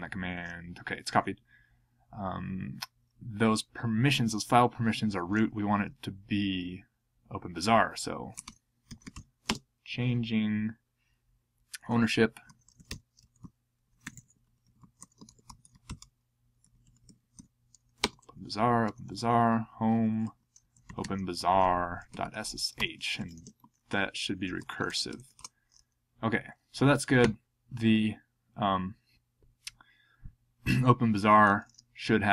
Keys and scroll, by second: 8.3-9.6 typing, 11.4-14.3 typing, 16.4-23.2 typing, 24.0 alt+f, 25.3 ctrl+e.